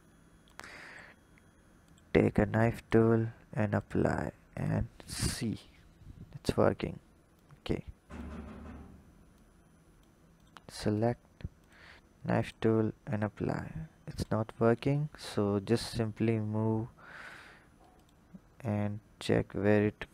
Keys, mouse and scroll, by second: 0.3-1.8 drag, 3.6-4.4 drag, 5.3 h, 7.1 click, 9.1-10.2 drag, 11.4 click, 14.0 click, 15.1 click, 18.6 click.